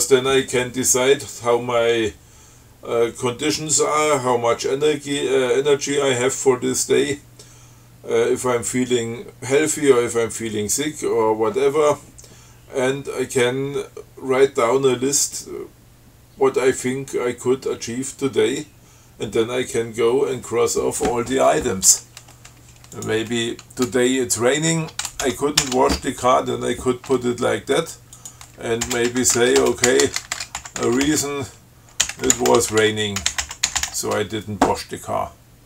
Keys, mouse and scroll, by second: 23.2 click, 25.5 ctrl+c, 28.0-28.8 drag, 29.1-34.6 typing.